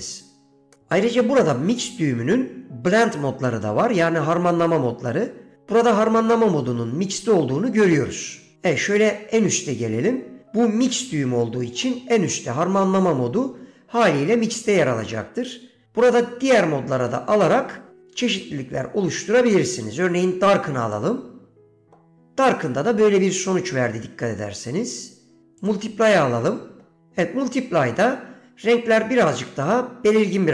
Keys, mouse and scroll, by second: 8.0-21.2 drag, 24.5-25.9 drag.